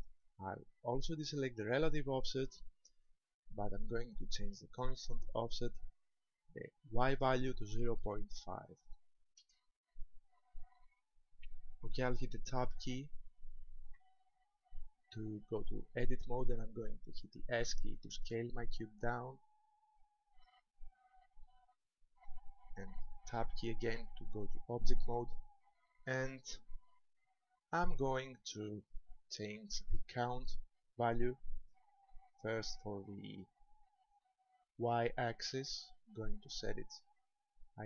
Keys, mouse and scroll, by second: 2.3 click, 4.9 click, 7.1 click, 14.0 Tab, 17.3 s, 20.4 ctrl+click, 21.5 shift+middle click, 23.3 Tab, 26.6-27.7 scroll down 2, 27.7 shift+middle click, 31.7 click.